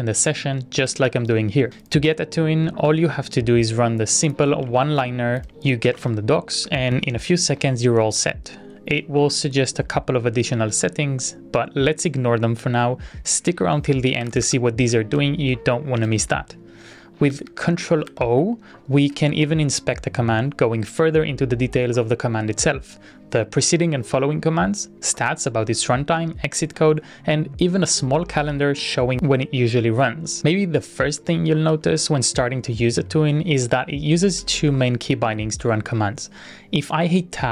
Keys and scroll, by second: 1.0 ctrl+r, 6.2 super+v, 6.7 Return, 7.5 Return, 7.5-8.4 typing, 17.2 ctrl+r, 17.3 Up, 17.5 Up, 18.2 ctrl+o, 31.7 Tab, 33.2 ctrl+r, 34.6 ctrl+r, 36.1-36.8 typing, 37.2 ctrl+r.